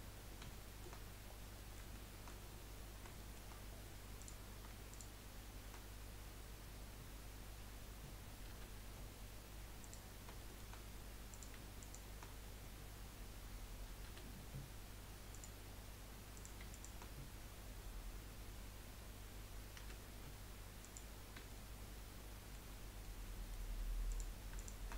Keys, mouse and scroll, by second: 0.6 shift+middle click, 1.2 scroll up 4, 1.5-2.6 middle drag, 2.6 scroll up 5, 3.3 shift+middle click, 4.2 click, 4.9 shift+click, 8.6 F3, 10.4 shift+middle click, 11.3 click, 11.8 shift+click, 14.1 F3, 16.3 click, 16.7 shift+click, 19.8 F3, 21.5-24.1 shift+middle drag, 24.1 click, 24.6 shift+click.